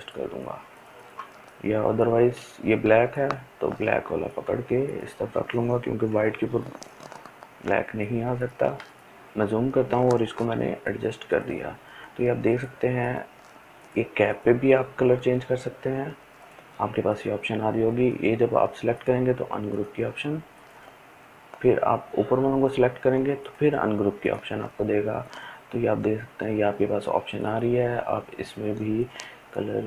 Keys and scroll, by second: 5.8 Delete, 8.4 ctrl+space, 8.9 ctrl+space.